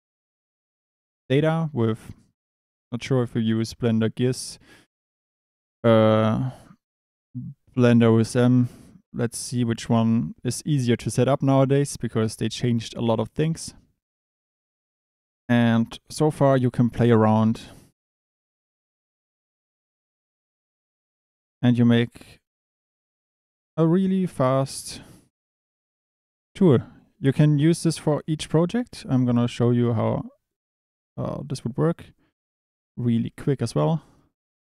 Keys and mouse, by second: 15.3 click, 15.9 Tab, 16.6 1, 16.8 click, 17.4 KP_7, 18.1 shift+middle click, 18.5-23.8 typing, 20.6 click, 21.9 click, 23.3 click, 23.6 click, 25.3 shift+d, 25.9 e, 26.5 e, 27.3 e, 28.7 click, 28.8 g, 30.5 click, 30.8 Tab, 31.0 click, 31.8 click, 33.8 Tab.